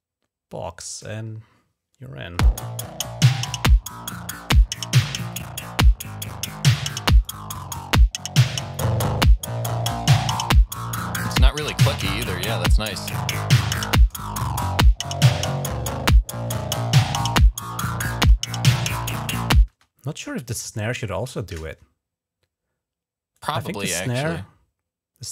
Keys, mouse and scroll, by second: 3.2-4.4 drag, 5.1 click, 6.3 click, 7.1 click, 7.7 click, 8.6-11.5 drag, 18.9 click, 19.2 click, 19.6 space, 23.2 right click.